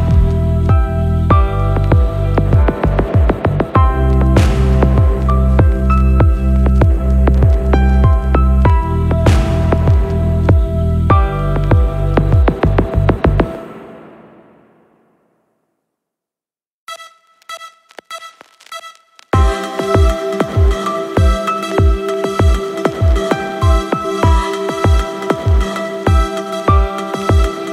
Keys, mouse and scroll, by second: 1.5 x, 2.0 click, 2.5 right click, 2.9 click, 3.5-4.0 drag, 4.7 g, 5.1 x, 8.0 click, 9.2 click, 9.8 space, 12.1 click, 15.0 c, 15.0 v, 16.2 click, 17.1 space, 22.5 space, 26.1-26.6 scroll down 4, 27.3 click, 27.6 scroll down 2.